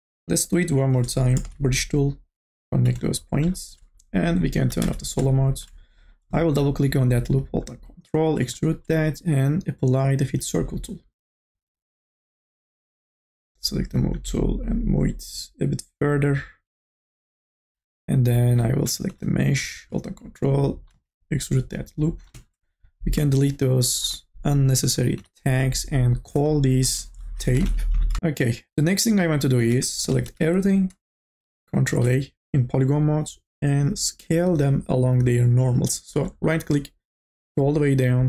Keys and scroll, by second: 1.3 m, 1.7 b, 4.7 2, 19.3 2, 21.3 ctrl+z, 25.2 Delete, 27.5 t, 27.9 a, 28.0 p, 30.0 3, 32.3 ctrl+a.